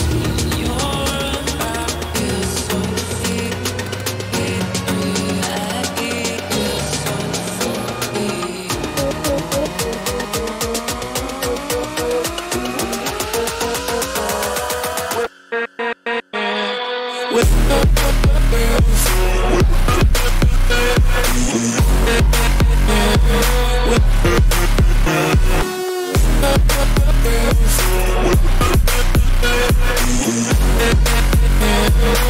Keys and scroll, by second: 7.9 ctrl+t, 26.2 ].